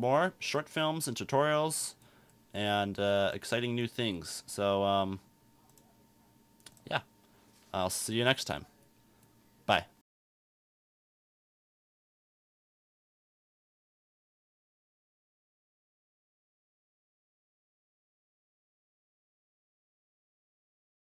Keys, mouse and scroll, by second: 0.6-3.6 drag.